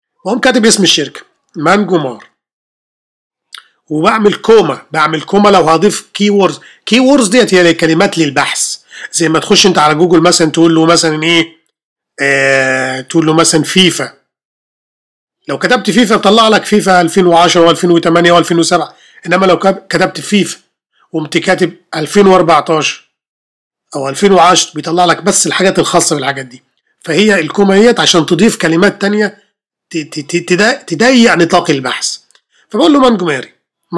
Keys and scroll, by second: 0.9-3.1 typing, 4.7 ,.